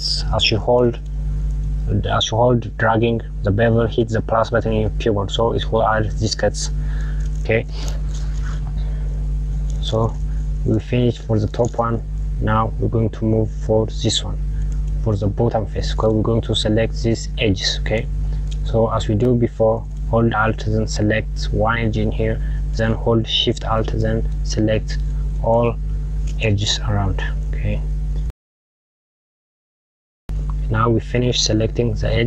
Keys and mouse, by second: 7.6 KP_Subtract, 9.5 click, 15.3 click, 19.4 click, 21.8 alt+click, 24.7 alt+shift+click, 26.0 alt+shift+click, 27.2 alt+shift+click, 28.2 alt+shift+click, 28.6 alt+shift+click, 28.7 alt+shift+click, 29.0 alt+shift+click, 29.3 alt+shift+click, 29.8 alt+shift+click, 30.3 alt+shift+click, 31.3 click.